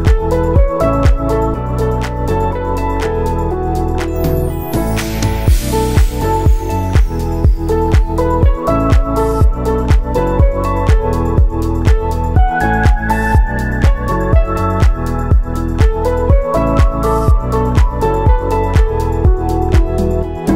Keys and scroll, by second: 1.8 ctrl+shift+d, 9.4 ctrl+shift+d, 17.8 n.